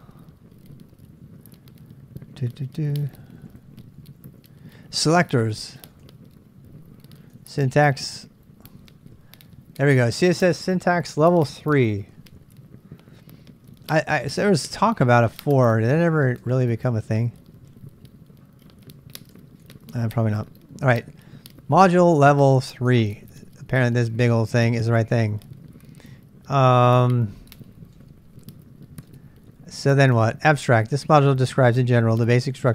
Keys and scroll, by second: 1.9-4.2 typing, 5.3-6.5 typing, 7.3 Return, 13.2 j, 13.7 j, 14.9 k, 16.4 k, 17.7 j, 19.3 typing, 29.0 space.